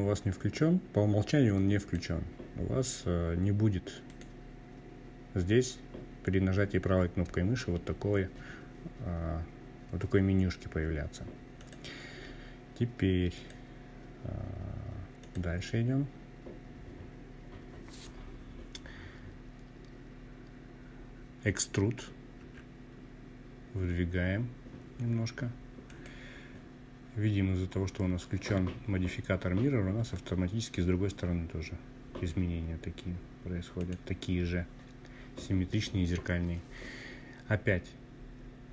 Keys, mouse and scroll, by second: 2.0-11.3 right drag, 11.3 click, 13.2 click, 14.2-15.0 scroll down 2, 15.0-15.6 scroll down 1, 15.6-16.2 scroll down 1, 20.4 e, 23.8 click, 31.8 click, 37.0 i.